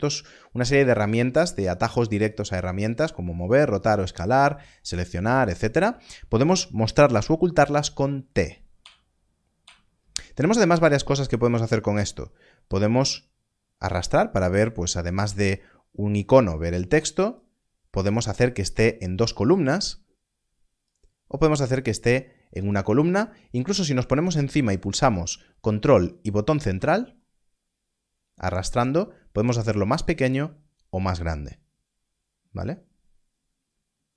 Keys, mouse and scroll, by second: 0.0 n, 0.0 click, 8.7 click, 11.3 click, 17.3 click, 20.8 click, 26.7 click, 27.2 ctrl+middle click.